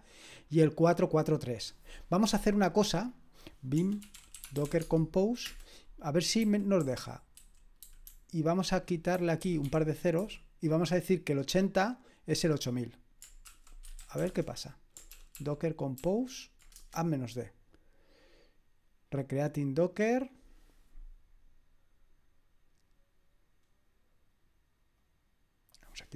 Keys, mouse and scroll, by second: 3.1 click, 3.8-5.1 typing, 5.4 Return, 6.4-10.7 typing, 13.6-14.7 typing, 15.1 ctrl+p, 15.5 ctrl+p, 16.0 ctrl+p, 25.0-26.1 drag.